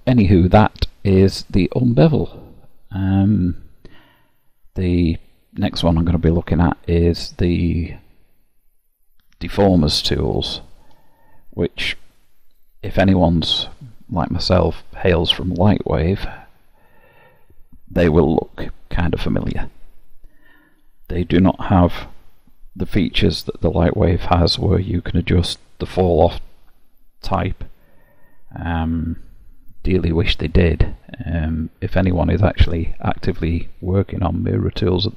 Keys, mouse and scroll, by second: 3.5 middle click, 6.2-6.6 scroll down 3, 6.9 middle click.